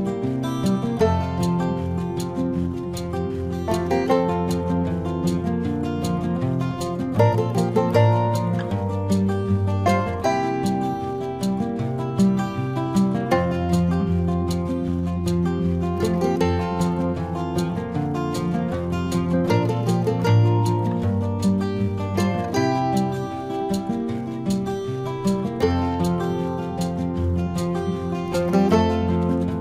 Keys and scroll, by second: 0.1 space, 1.2 space, 1.9 ctrl+-, 4.3 ctrl+alt+z, 5.5 ctrl+alt+z, 5.9 ctrl+=, 6.4 space, 7.0 ctrl+=, 10.0 ctrl+-, 10.9 ctrl+-, 11.4 c, 12.7 ctrl+=, 13.7 ctrl+alt+z, 14.5 space, 15.1 ctrl+=, 22.3 ctrl+=, 24.9 ctrl+alt+z, 29.3 ctrl+alt+z.